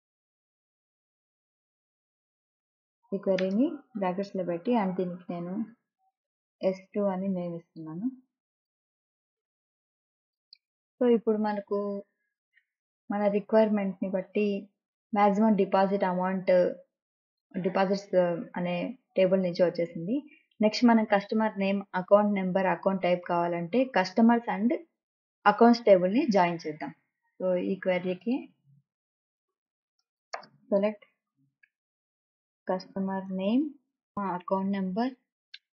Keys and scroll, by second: 4.1 shift+9, 7.0 s, 7.4 2, 29.2-35.7 typing.